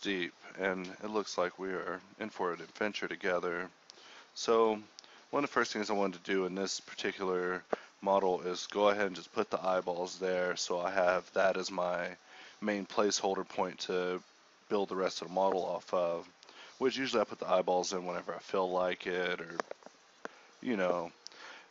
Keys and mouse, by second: 0.0-2.6 typing, 0.6 KP_Divide, 1.9 Tab, 2.2 Tab, 2.2 KP_Divide, 6.7 s, 6.9 g, 8.1-10.7 typing, 11.8-14.6 typing, 16.4 KP_1, 16.8 middle click, 17.9 KP_Divide, 18.4 a, 19.1 shift+s, 19.7 shift+a, 21.0 click, 21.1 Tab, 21.2 s.